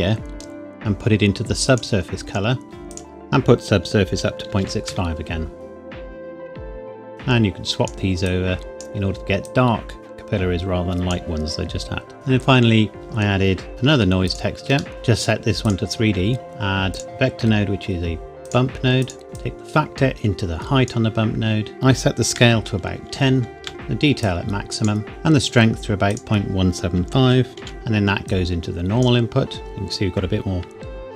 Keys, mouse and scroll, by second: 2.9 click, 4.1 KP_Decimal, 4.5 KP_6, 4.9 KP_Enter, 7.1 KP_Enter, 7.1 click, 11.8-12.1 scroll down 1, 12.1 middle click, 13.1-13.4 scroll up 1, 13.4 scroll down 1, 13.7 shift+d, 14.2 click, 14.9 click, 16.9 click, 18.4 click, 22.9 KP_1, 23.1 KP_0, 23.6 KP_Enter, 24.2 click, 26.1 click, 27.2 KP_Decimal, 27.5 KP_1, 27.7 KP_Enter, 28.2 click, 29.8-31.1 scroll up 1.